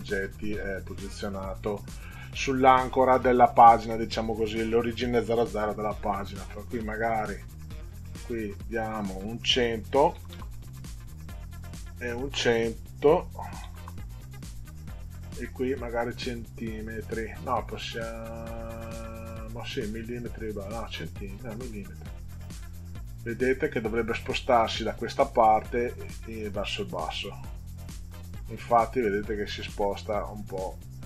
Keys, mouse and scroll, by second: 3.2-3.9 scroll down 2, 6.9 click, 9.6 1, 10.2 0, 11.7 click, 13.1 1, 13.8 0, 14.7 click, 21.9 click, 27.3 click, 29.6-31.0 drag.